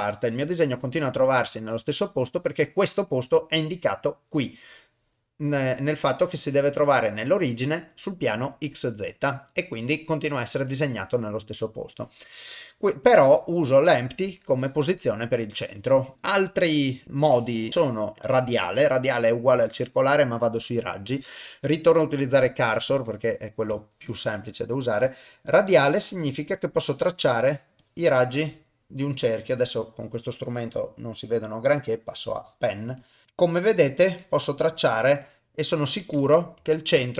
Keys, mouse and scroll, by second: 1.0 middle click, 9.3 middle click, 10.7 KP_0, 12.0 click, 13.1 click, 16.6-22.5 drag, 23.8 shift+right click, 25.0 click, 26.0 click, 27.0 click, 27.8 click, 28.5 click, 29.2 click, 30.7-31.8 drag, 32.4 click, 33.0 click, 33.3 click, 33.7 click, 34.2 click, 34.7 click, 35.2 click, 35.9 click, 36.7 shift+right click.